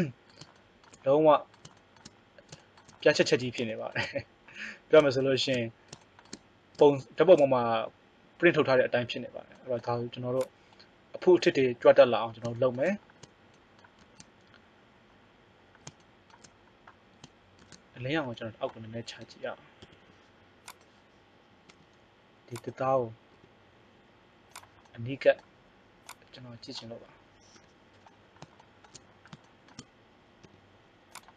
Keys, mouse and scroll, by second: 3.0 middle click, 10.3 click, 13.9 shift+z, 17.6 shift+z, 19.2 KP_3, 19.8 KP_1, 21.8 g, 23.4 r, 26.0 click, 27.6 KP_7, 30.4 g.